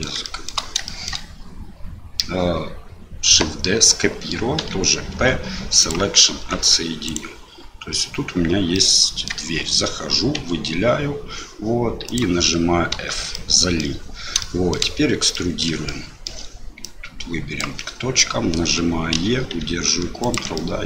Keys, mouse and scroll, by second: 0.3 shift+click, 1.0 shift+middle click, 5.1 p, 6.3 Tab, 7.1 click, 8.7 middle click, 10.3 a, 12.0 click, 12.9 f, 13.3 click, 14.4 shift+click, 15.3 middle click, 15.8 shift+middle click, 16.8-17.9 drag, 19.1 e, 20.7-20.8 middle drag.